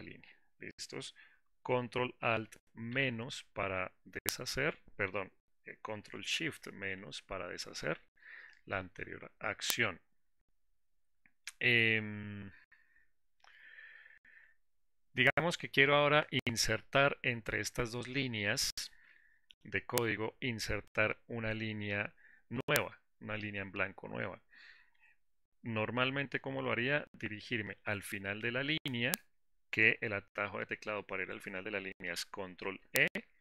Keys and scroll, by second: 3.4 ctrl+alt+KP_Subtract, 6.5 ctrl+shift+-.